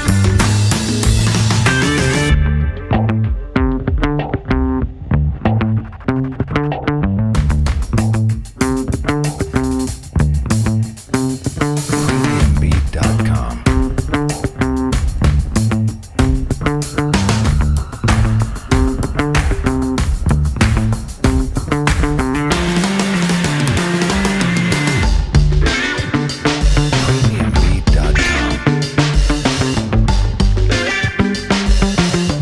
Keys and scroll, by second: 2.5 F4, 7.6-8.5 typing, 11.3 1, 11.4 F3, 13.1 F3, 17.2 1, 17.9 F4, 19.2 F4, 19.4-20.2 typing, 20.4 alt+g, 21.6 F4, 24.2-25.1 typing, 27.5 F3, 29.0 F3, 29.2 w, 29.3 F3.